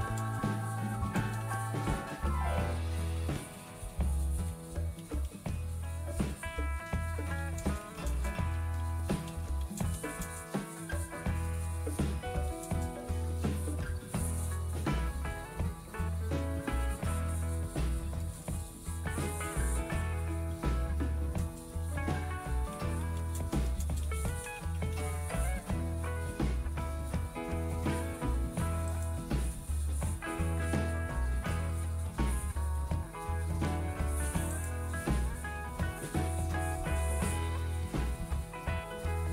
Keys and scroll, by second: 0.0-3.5 typing, 4.6-8.1 typing, 9.6-11.0 typing, 12.8-16.4 typing, 17.8-23.0 typing, 23.1 Return.